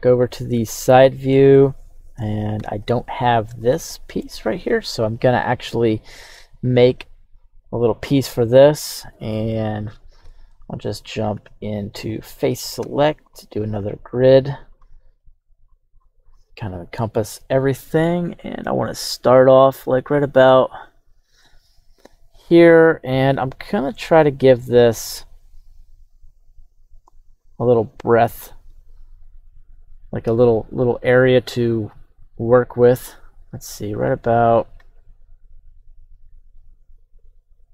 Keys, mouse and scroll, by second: 0.8-1.5 scroll up 3, 1.5 middle click, 2.5 KP_1, 3.7-4.2 shift+middle drag, 11.4 Tab, 12.0 right click, 12.8 q.